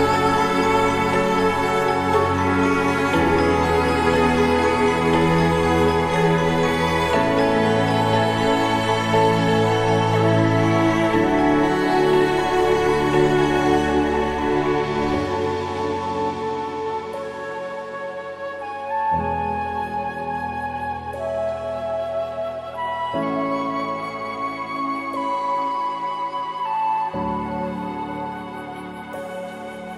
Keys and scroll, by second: 8.4 ctrl+=, 8.6 ctrl+=, 8.8 ctrl+=, 9.2 ctrl+=, 11.6 ctrl+=, 12.1 ctrl+=, 26.8 ctrl+=, 28.1 alt+BackSpace, 28.3 ctrl+d, 28.4 ctrl+-, 28.9 ctrl+=.